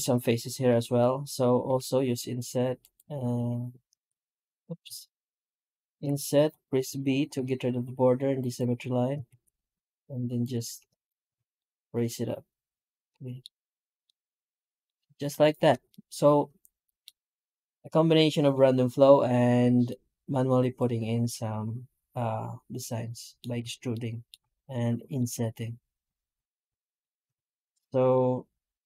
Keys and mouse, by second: 0.1-0.7 middle drag, 1.5 i, 3.8 alt+s, 4.7 ctrl+z, 5.8 i, 9.1 alt+s, 10.5 Tab, 11.2 alt+a, 11.4-13.3 middle drag, 13.9-14.6 middle drag, 14.7 middle click, 15.1-16.8 middle drag, 19.7-21.3 middle drag, 21.4 middle click, 21.5-23.2 middle drag, 23.8-24.1 shift+middle drag, 24.6-25.0 middle drag, 25.7 right click, 26.0 Tab, 26.5 Tab, 26.8 middle drag, 27.2 alt+a, 27.9-28.8 middle drag.